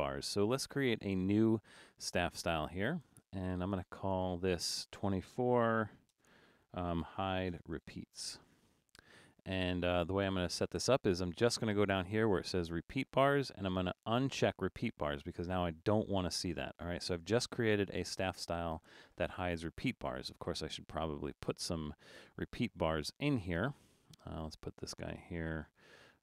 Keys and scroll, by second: 5.6-9.2 typing.